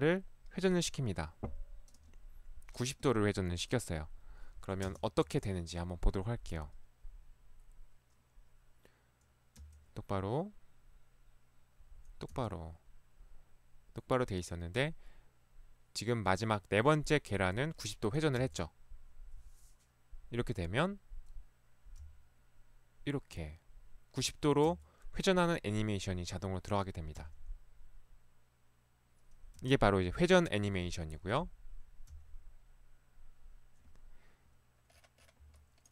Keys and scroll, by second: 4.9 space, 5.3 Right, 9.7 Right, 12.3 Right, 18.5 Right, 22.1 Left, 24.7 Right, 27.2 Left, 29.6 Right, 32.1 BackSpace, 35.4 Escape.